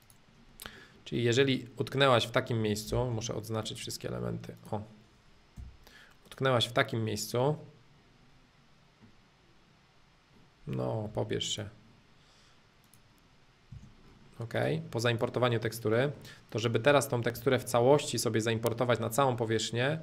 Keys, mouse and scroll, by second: 0.0 click, 0.8-2.6 middle drag, 2.6 Escape, 3.0 space, 3.6-5.6 drag, 5.6 b, 6.3-8.3 drag, 8.9-10.9 middle drag, 11.5-13.5 drag, 13.7 space, 14.0 middle click, 14.6-15.7 drag, 15.7 middle click, 16.5 click, 17.3 h, 17.6-20.0 middle drag.